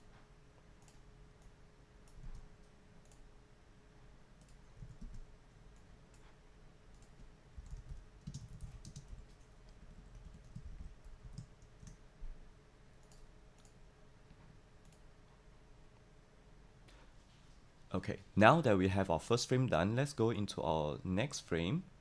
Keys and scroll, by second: 2.2 super+c, 4.9 super+a, 5.1 super+v, 7.4-9.5 typing, 9.7 Right, 9.9 Right, 10.6 shift+Left, 10.7 shift+Left, 10.9-11.7 typing, 11.8 Return.